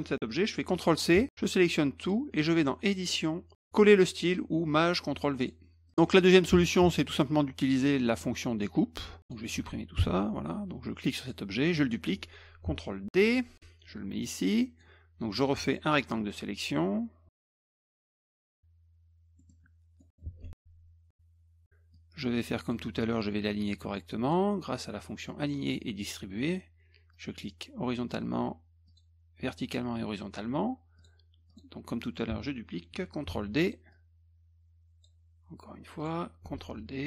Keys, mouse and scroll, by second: 1.1 ctrl+c, 1.3-2.1 drag, 2.8 click, 5.4 click, 5.9 click, 7.6-8.4 drag, 9.2 click, 11.2 click, 13.2 ctrl+d, 13.9-14.8 drag, 15.7 click, 16.4-17.5 drag, 18.4 click, 19.4 middle click, 20.0 middle click, 21.1 middle click, 21.3 middle click, 21.9-22.7 drag, 24.2 click, 27.1 click, 28.9 click, 31.0 click, 31.5 click, 33.3 ctrl+d, 33.9-35.0 drag, 36.0 click, 36.5 ctrl+d.